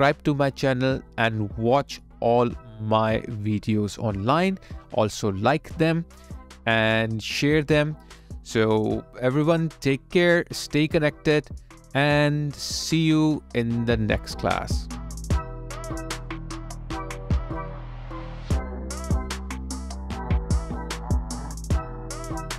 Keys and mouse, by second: 13.1 ctrl+a, 14.9 ctrl+e.